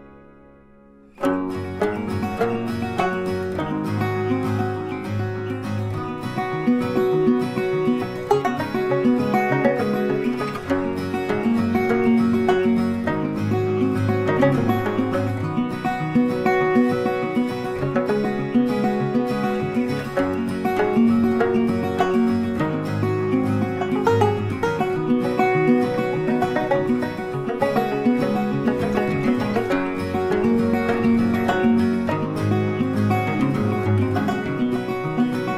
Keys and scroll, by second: 35.3 Up.